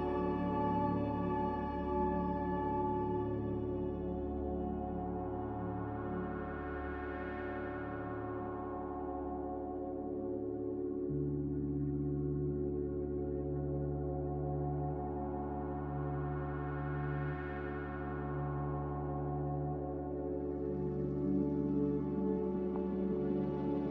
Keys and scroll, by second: 5.5 Escape, 10.8 z.